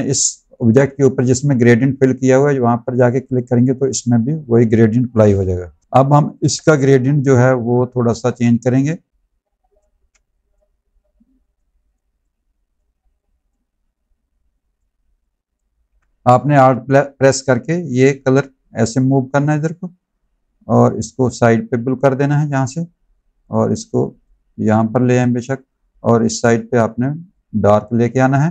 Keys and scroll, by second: 5.6 v, 9.9 ctrl+z, 15.8 ctrl+z.